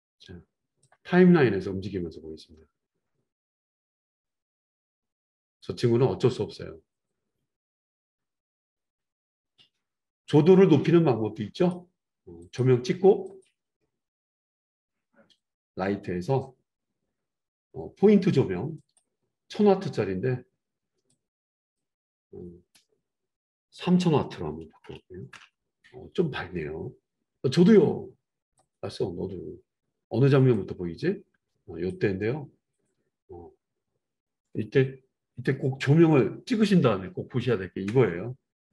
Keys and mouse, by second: 0.8-11.7 drag, 11.7-12.4 middle drag, 12.4 click, 12.6 middle click, 13.2 click, 13.4-15.4 middle drag, 15.4 click, 15.5-18.8 middle drag, 18.8-28.8 drag, 28.8-30.5 middle drag, 30.5-38.7 drag.